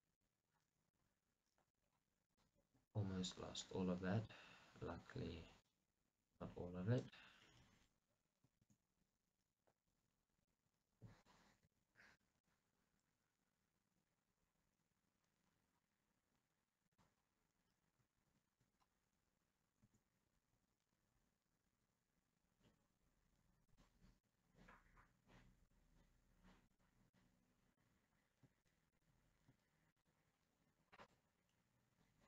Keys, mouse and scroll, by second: 3.1 right click, 8.5 scroll down 2, 8.7 shift+z, 10.3 scroll down 1, 10.6-17.2 middle drag, 11.8 g, 17.2 click, 17.3 scroll, 19.1-19.9 scroll, 20.0 r, 23.9 click, 24.3-26.9 middle drag, 25.9-26.9 scroll up 2, 26.9 click, 27.3-29.0 middle drag, 28.1-29.0 scroll up 2, 29.0-31.6 shift+drag, 31.6-32.2 middle drag.